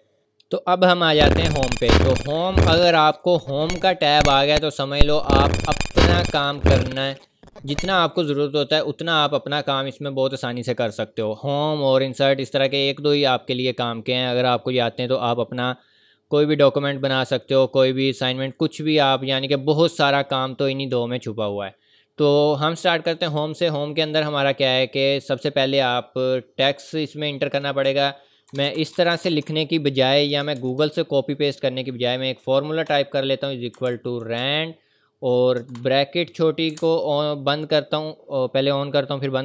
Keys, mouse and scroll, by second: 24.2 click, 28.2-29.5 typing, 28.5 click, 30.8 BackSpace, 32.9 typing, 36.7 Left.